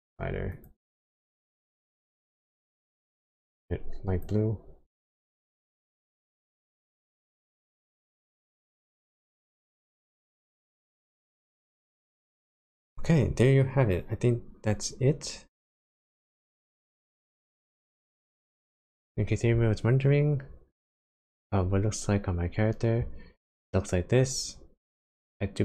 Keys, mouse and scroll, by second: 0.5 click, 5.6 middle click, 6.6 scroll up 1, 7.6 middle click, 9.0-10.6 scroll down 14, 11.0 middle click, 15.9 middle click.